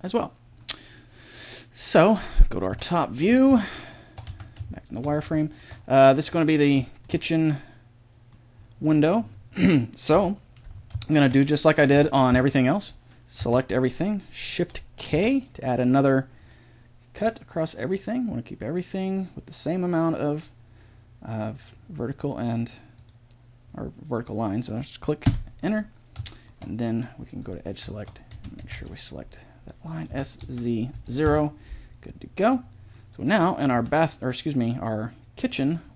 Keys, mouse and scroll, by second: 0.6 middle click, 2.7 KP_7, 4.3 z, 10.1 KP_1, 11.9 Tab, 13.5 a, 15.1 shift+k, 26.5 middle click, 27.4-29.2 drag, 28.3 a, 28.6 a, 28.8 b, 29.2 middle click, 30.1 s, 32.9-35.0 middle drag, 33.7 z.